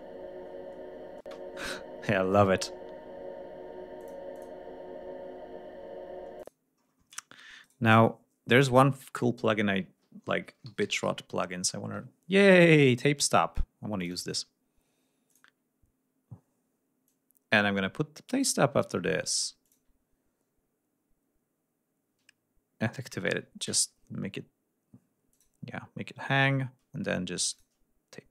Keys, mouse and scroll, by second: 1.3 space, 4.0 click, 4.4 click, 6.4 click, 7.7 right click, 8.6 click, 10.3-12.0 typing, 14.0 click, 15.3 click, 17.1 click, 18.4 right click, 19.7 click, 25.4 click, 27.6 click.